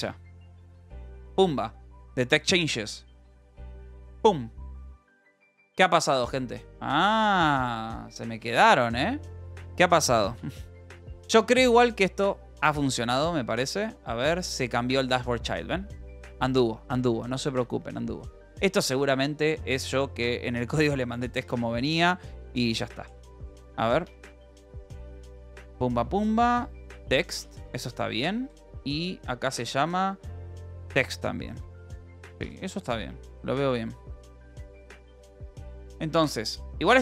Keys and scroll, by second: 20.5 Escape, 21.3 space, 22.5-23.8 typing, 23.9 Up, 24.1 Return, 25.1-29.9 typing, 28.7 Return, 31.5-34.8 typing, 35.1 ctrl+s.